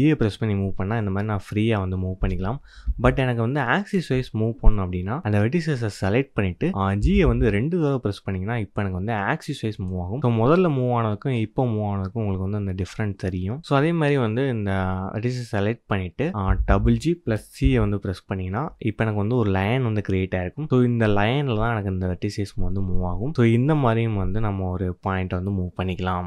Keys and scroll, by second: 7.0 g, 16.5 g.